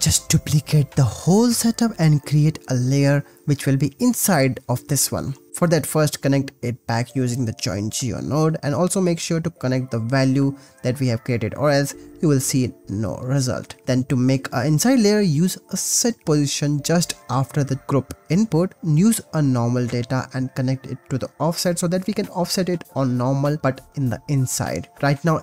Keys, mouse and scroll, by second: 0.8 shift+d, 2.8 click, 3.1 click, 3.5 click, 4.0 click, 4.8-5.9 drag, 7.7 click, 8.1-8.5 drag, 8.7 click, 9.2-11.1 drag, 11.9 ctrl+s, 12.6 click, 13.6 drag, 13.8 x, 13.8 shift+a, 17.2 click, 18.3 click, 18.8 shift+a, 20.1 click, 20.9-21.9 drag, 23.8 click, 25.0 BackSpace.